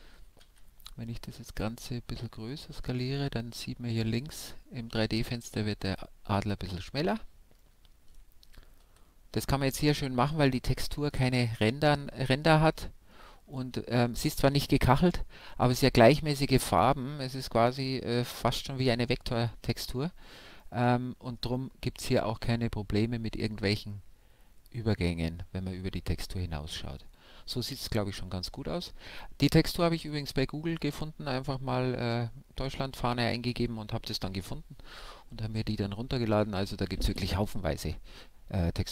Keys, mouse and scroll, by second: 4.6-8.1 middle drag, 5.8 click, 5.8 a, 6.6 Tab, 8.9 a, 9.8-23.4 middle drag, 23.4-26.9 middle drag, 27.0-38.9 middle drag.